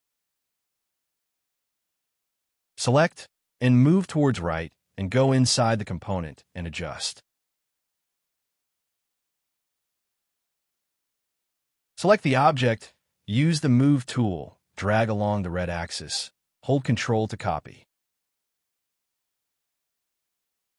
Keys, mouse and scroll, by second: 0.2 m, 1.4 middle click, 2.3-5.2 typing, 3.3 double click, 3.7 double click, 4.1 middle click, 5.7 double click, 6.3 m, 7.9-9.3 typing, 8.5 middle click, 9.5 Escape, 10.0 Escape, 10.0-11.0 scroll down 2, 11.4 middle click, 20.0 space, 20.1-20.5 scroll down 2, 20.2 middle click, 20.5 scroll up 1, 20.6-20.7 scroll down 1.